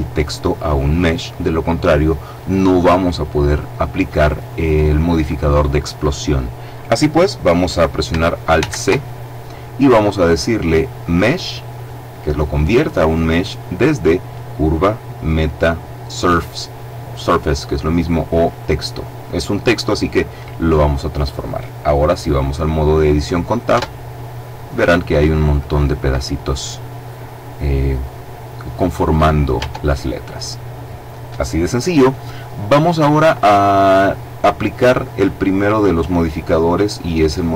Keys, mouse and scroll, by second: 8.4 alt+c, 19.8 click, 23.6 Tab, 26.4-27.1 scroll up 2, 29.4 Tab, 30.1-30.6 scroll down 1, 33.9 click, 34.7 click.